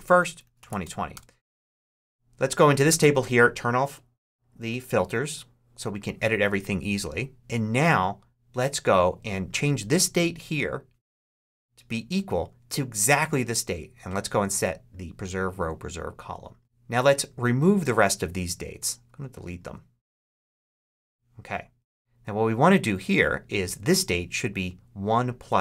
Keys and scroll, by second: 0.0-1.2 typing, 11.3 =, 20.0 shift+BackSpace, 20.7 BackSpace.